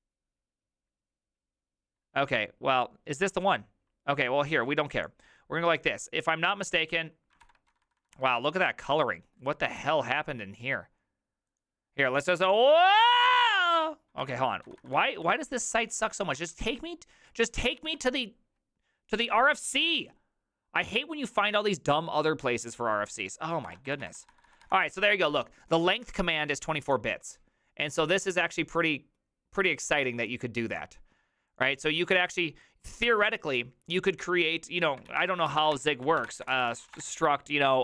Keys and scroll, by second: 7.5 ctrl+f, 7.7-8.2 typing, 14.3 ctrl+f, 14.7-15.1 typing, 16.5 shift+h, 17.9 h, 23.7 ctrl+f, 24.0 typing, 35.2 alt+{, 35.4-37.8 typing.